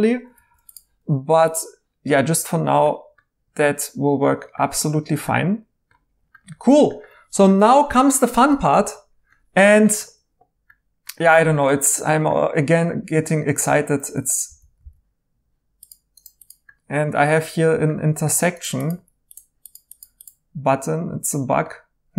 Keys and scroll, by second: 6.6 2, 14.5 super+d, 14.8 super+d, 18.9 1.